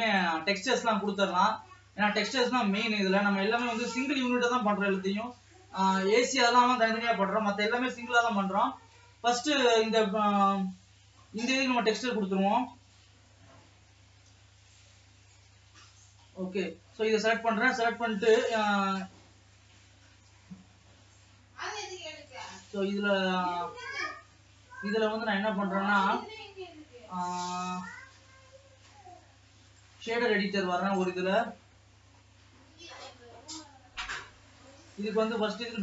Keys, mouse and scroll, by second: 0.0-1.2 middle drag, 0.5 scroll down 2, 1.0 click, 1.8 Tab, 2.5 middle click, 3.1 alt+a, 3.8 KP_0, 4.9 scroll up 2, 5.4 alt+a, 6.1 ctrl+s, 11.2 l, 12.6 scroll down 3, 12.9 middle click, 13.8 l, 14.1 l, 14.8 l, 15.5-16.5 middle drag, 16.5 scroll up 2, 16.7 middle click, 17.6-18.6 scroll down 3, 18.6-20.3 middle drag, 20.3-33.0 drag, 33.0 n.